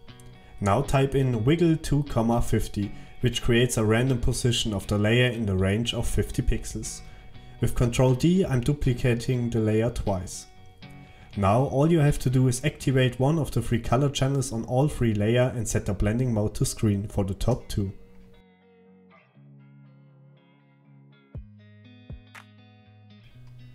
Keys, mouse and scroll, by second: 1.7 alt+click, 7.7 ctrl+d.